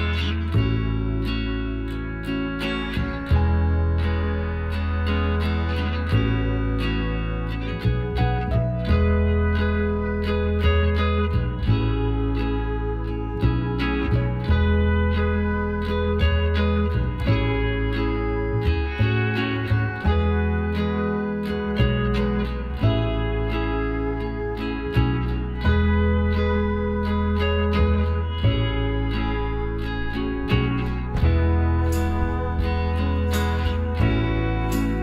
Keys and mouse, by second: 2.4 i, 7.4 s, 10.5 middle click, 11.3 KP_Divide, 12.0 middle click, 14.4-16.1 middle drag, 16.1-17.8 drag, 18.4-22.7 drag, 23.0-24.7 middle drag, 23.9 z, 24.9 z, 26.4 middle click, 29.4-31.4 middle drag, 32.6 KP_Divide, 33.4-35.0 middle drag, 34.4 KP_Decimal.